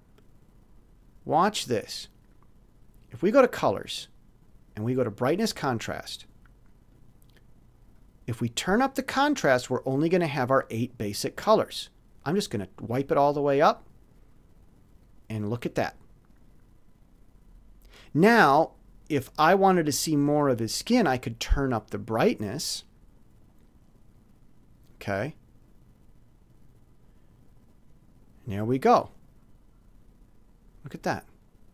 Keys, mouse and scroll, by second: 3.2 click, 4.9 click, 6.9-8.1 drag, 12.3-13.4 drag, 21.9 click, 24.9 click.